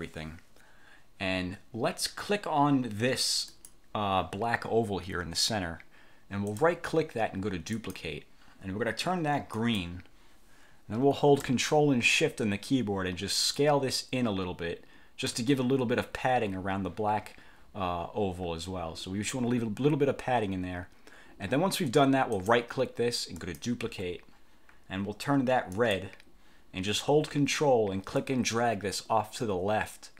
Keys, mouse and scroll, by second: 3.6 click, 6.6 click, 7.9 click, 9.7 click, 13.7-15.6 ctrl+shift+drag, 22.4 click, 23.5 click, 25.8 click, 28.3-30.1 ctrl+drag.